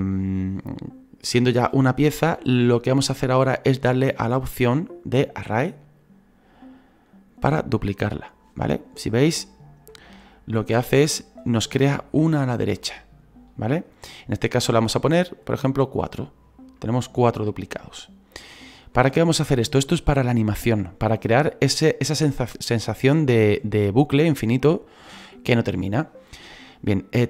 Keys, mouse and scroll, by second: 6.9-9.4 drag, 9.4-15.5 shift+middle drag, 15.5 click, 16.3-16.8 scroll down 3, 16.8-27.2 shift+middle drag.